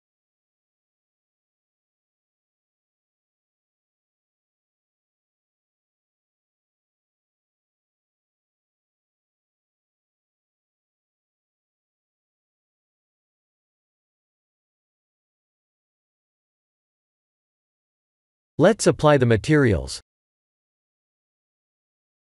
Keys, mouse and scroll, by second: 4.1 click, 4.5 b, 5.3 g, 7.1 click, 7.5 middle click, 8.6 shift+z, 8.8 click, 9.2 middle click, 11.0 click, 11.5 Tab, 11.8 click, 12.3 g, 13.5 click, 13.9 click, 14.7 middle click, 15.4 click, 16.0 Tab, 18.2 click, 19.1 Tab, 20.4 click, 21.6 click.